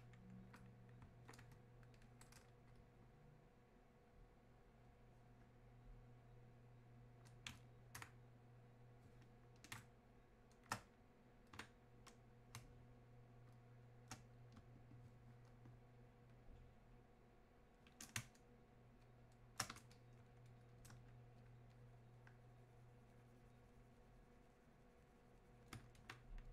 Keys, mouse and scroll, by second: 9.7 shift+space, 10.3 space, 12.6 shift+space, 14.0 space, 16.3-18.2 shift+drag, 18.2 space, 19.9-26.5 alt+drag.